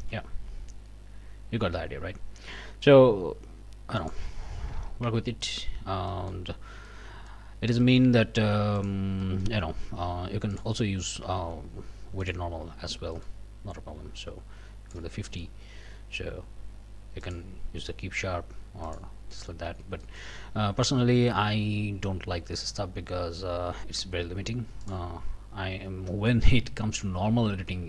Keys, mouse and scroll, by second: 0.0 q, 4.0 middle click, 4.4 scroll down 2, 4.8 alt+a, 5.1 alt+Tab, 5.4 alt+middle click, 5.8 alt+scroll down 2, 6.1 alt+middle click, 6.5 scroll up 2, 6.9 middle click, 7.5 scroll up 3, 7.8 shift+middle click, 8.8 middle click, 9.2 middle click, 10.5 middle click, 12.2-13.4 drag, 14.2 click, 15.3 click, 17.2 click, 17.9 click, 18.8 click, 19.3 click, 19.7 Tab, 20.0 click, 21.1 Tab, 24.8 click, 25.8 Tab, 26.1 click, 27.7 middle click.